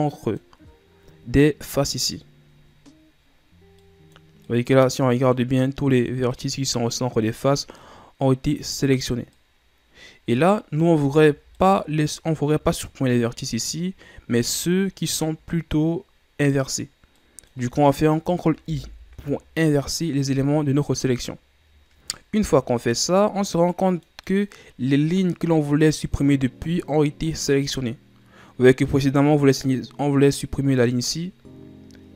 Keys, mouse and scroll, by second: 0.0 scroll up 1, 0.1-3.2 middle drag, 3.8 scroll down 1, 4.0-11.4 middle drag, 11.4-11.7 shift+scroll up 1, 11.7 middle click, 12.3-12.9 scroll up 1, 16.9-17.4 scroll down 1, 17.4-18.8 middle drag, 18.8 ctrl+i, 21.5-23.0 scroll up 1, 23.0-23.6 scroll down 1, 23.7-25.3 middle drag, 25.3-28.3 scroll up 1.